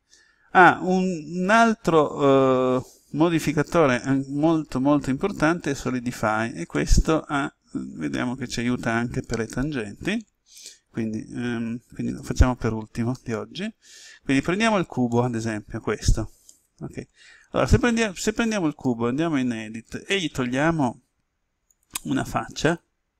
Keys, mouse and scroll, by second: 6.7-8.7 middle drag, 12.1 ctrl+n, 13.1 Return, 15.1 middle click, 15.7-16.4 scroll up 1, 16.4-17.7 middle drag, 19.8 right click, 21.6 click, 22.5 right click.